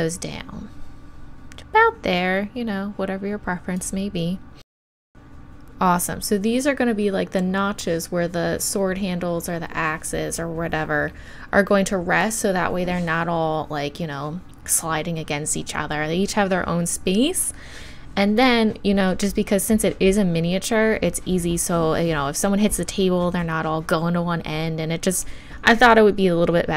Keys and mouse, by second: 5.1-26.7 middle drag.